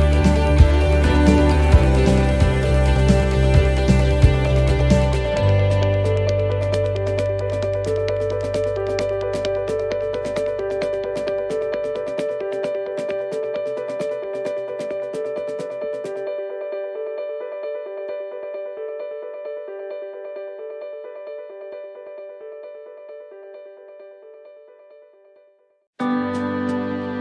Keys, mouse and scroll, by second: 1.7 click, 2.5 right click, 2.9 shift+right click, 3.2-4.7 shift+right click, 5.4 shift+right click, 5.4 middle click, 5.7-6.0 scroll down 2, 6.2 shift+middle click, 6.5-6.8 scroll down 1, 6.8 middle click, 7.9 e, 12.2 middle click, 13.5 ctrl+r, 14.6 s, 16.3 ctrl+r, 17.2 s, 18.1 middle click, 18.4-18.7 scroll down 2, 18.7 middle click, 19.6 middle click, 20.0-20.4 scroll up 3, 20.6 right click, 21.1 right click, 21.9 right click, 23.2 click, 26.0 middle click, 26.9-27.2 scroll down 4.